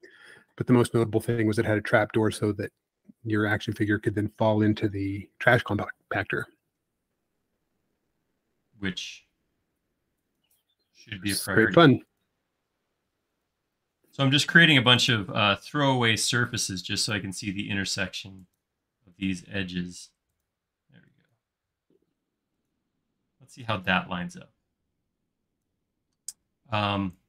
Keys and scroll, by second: 4.2 space, 6.4 l, 14.2 l, 20.8 e.